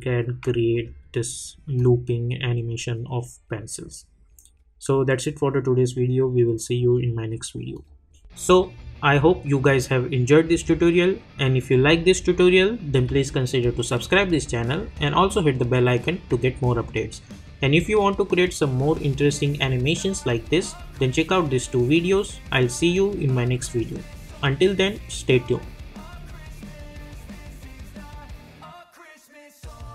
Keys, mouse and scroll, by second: 1.7 click, 7.7 click.